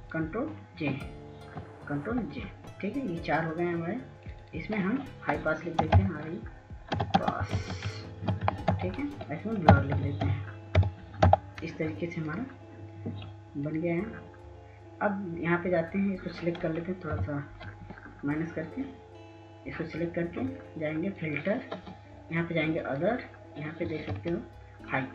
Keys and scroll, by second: 1.7 ctrl+j, 2.3 ctrl+j, 6.0-7.9 typing, 9.6-11.5 typing, 17.4 ctrl+-, 24.4 ctrl+s.